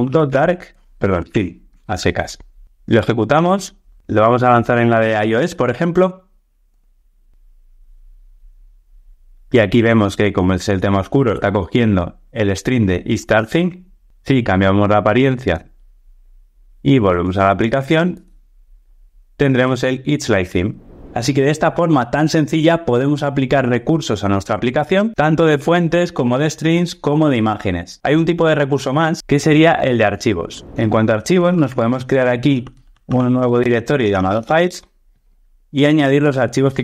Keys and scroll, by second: 1.6 Return, 2.8 ctrl+r, 31.6 super+n.